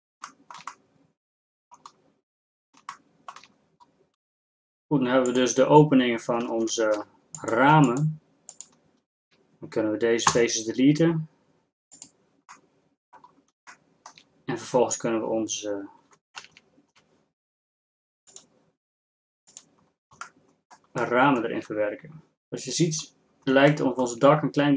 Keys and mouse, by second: 6.5 ctrl+Tab, 10.3 x, 13.7 click, 16.6 a, 17.3 a.